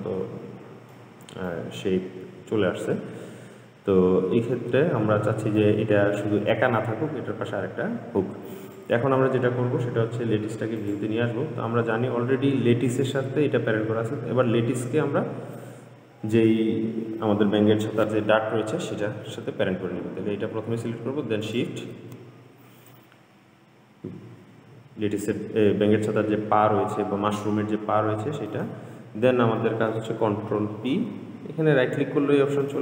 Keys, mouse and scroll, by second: 1.7-4.7 middle drag, 6.5-7.9 scroll up 3, 7.9-8.9 scroll down 2, 8.9 click, 11.0 click, 13.2 click, 21.7 shift+click, 29.3-31.8 right drag.